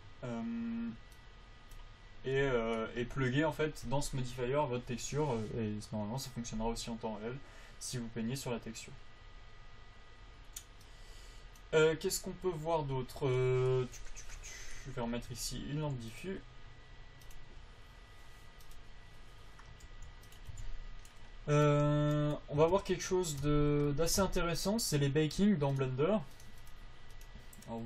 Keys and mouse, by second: 15.6 a, 16.5-19.2 drag, 20.2 g, 20.6 click, 20.9 a, 22.0 right click, 23.0 Tab, 23.8 Tab.